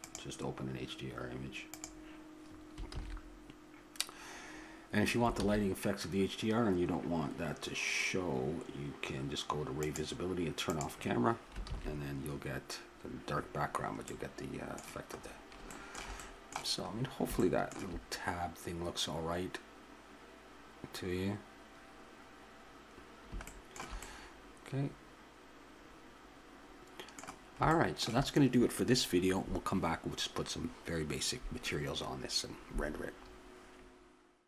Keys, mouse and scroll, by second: 3.2 shift+z, 5.6 shift+z, 7.4-8.6 drag, 9.8-12.6 drag, 11.7 shift+z, 14.1-17.3 middle drag.